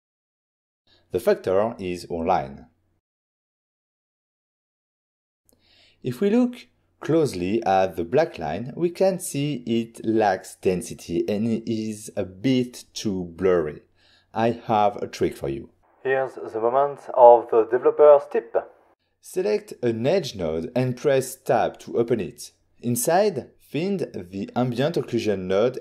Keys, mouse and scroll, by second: 0.8 click, 1.8 click, 3.5 click, 5.0 ctrl+shift+click, 5.6 ctrl+shift+click, 6.6 ctrl+middle click, 20.9 middle click, 21.8 middle click, 23.6 click.